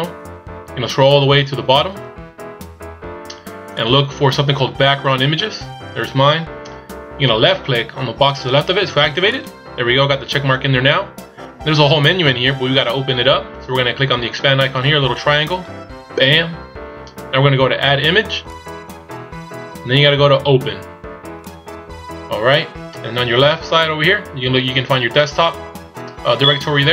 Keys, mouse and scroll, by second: 0.7-3.8 scroll down 25, 3.8 click, 4.2-6.0 scroll up 2, 9.4 click, 15.6 click, 18.5 click, 21.5 click.